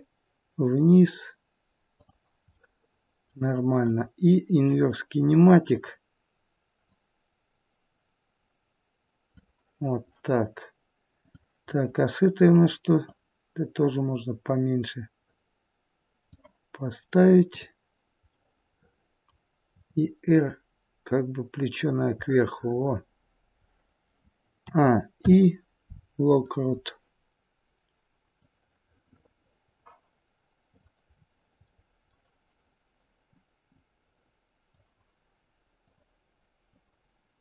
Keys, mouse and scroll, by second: 2.4 middle click, 3.7 click, 5.2 scroll down 5, 6.7 click, 6.7-7.3 scroll down 3, 11.1 click, 12.9 click, 17.3 click, 18.3 middle click, 19.7 r, 22.2 middle click, 24.6 a, 25.2 i, 27.3-28.3 scroll down 2, 28.4 click, 30.7 click, 31.1-31.7 scroll down 2, 31.7 middle click, 31.7 scroll down 2, 33.8 click, 35.8 click.